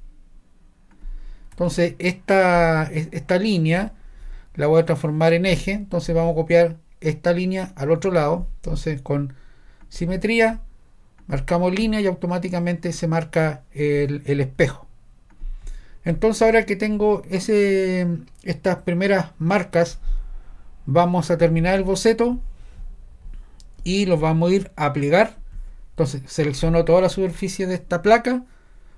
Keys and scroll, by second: 1.6 Escape.